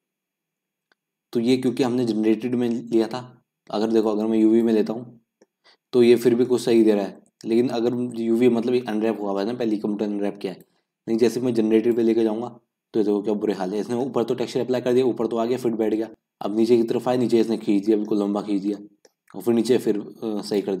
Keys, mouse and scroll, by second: 0.7-1.1 scroll up 3, 4.8 click, 5.1-5.6 scroll down 2, 5.6-6.3 middle drag, 6.3 scroll up 1, 6.4-11.9 middle drag, 11.9 click, 12.5-13.0 scroll down 1, 13.0-14.0 scroll up 2, 14.1-20.8 middle drag.